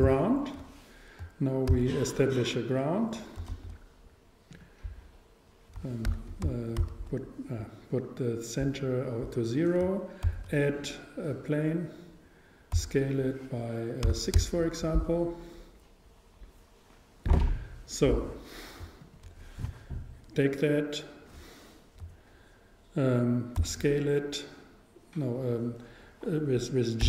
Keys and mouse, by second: 1.7 shift+s, 2.9 shift+s, 3.1-4.8 drag, 3.5 shift+a, 6.1 z, 6.8 shift+c, 10.3 shift+a, 12.8 s, 19.0-21.1 super+right drag, 23.6 shift+s, 24.9 shift+s.